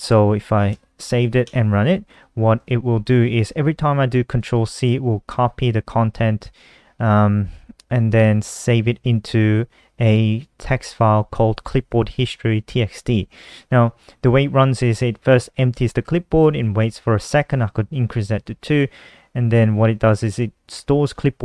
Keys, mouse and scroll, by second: 0.2 ctrl+s, 1.0 F5, 2.1 click, 3.1-3.8 typing, 11.3 click, 15.8 click, 16.1 click, 19.6 click, 19.8 click, 21.3 click.